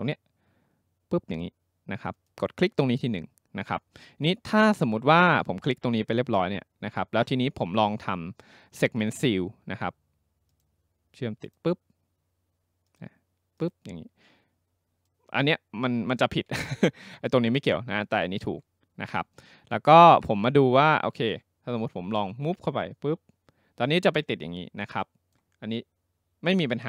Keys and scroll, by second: 16.7 ctrl+z.